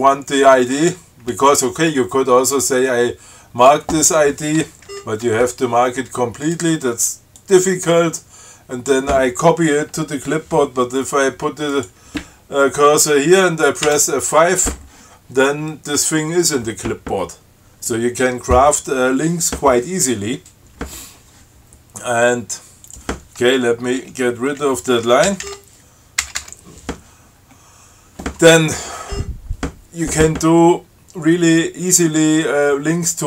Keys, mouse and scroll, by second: 3.0 click, 5.1 shift+Right, 6.7 click, 7.6-9.3 drag, 12.0 click, 14.1 F5, 23.1 click, 24.7 Down, 25.5 ctrl+k, 26.5 BackSpace, 27.6-28.0 scroll up 1, 29.3 scroll up 1.